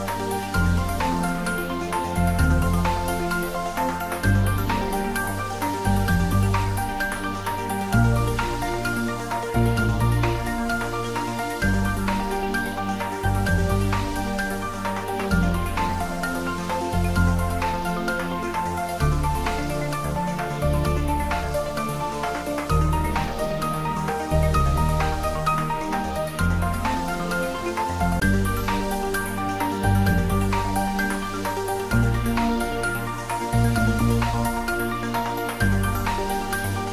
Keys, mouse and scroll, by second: 0.4 scroll down 1, 6.6 shift+z, 8.0-9.0 scroll up 2, 9.0-9.6 scroll down 2, 10.7-11.5 shift+drag, 12.2 shift+z, 13.6 shift+d, 14.0 x, 22.0 click, 23.1 3, 25.1-25.4 scroll up 1, 25.6 scroll up 1, 27.0-32.4 drag, 32.7 g, 33.6 Left, 36.8 Down.